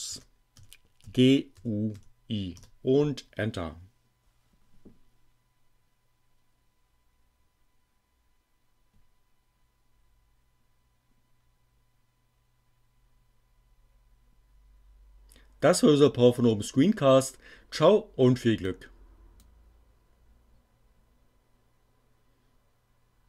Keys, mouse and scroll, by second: 0.0-2.0 typing, 2.4 Return, 18.6-19.6 drag.